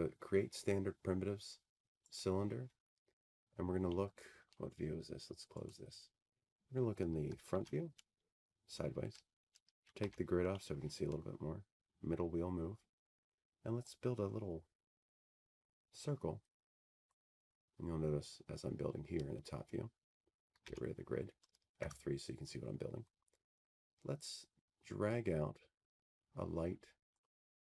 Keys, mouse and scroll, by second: 1.4-3.6 drag, 7.8 click, 8.8 scroll, 10.3 middle click, 11.3 click, 13.1 f, 14.1 middle click, 14.4 middle click, 14.5-15.3 scroll, 15.6 g, 16.9 scroll, 17.5 scroll, 22.6 click, 23.9-24.8 scroll, 26.3 g, 27.3 F3.